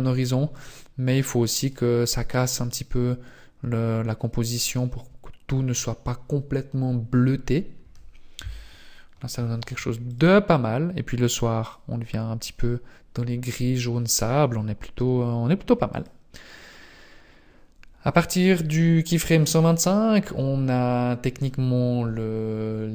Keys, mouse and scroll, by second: 0.6 click, 2.0 click, 10.2 click, 11.6 click, 16.0 click.